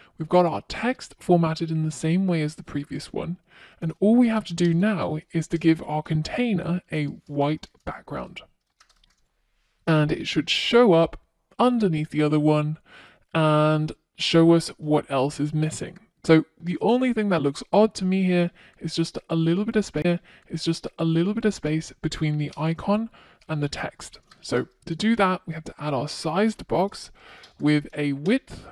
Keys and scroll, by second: 3.6 Return, 22.4 Return.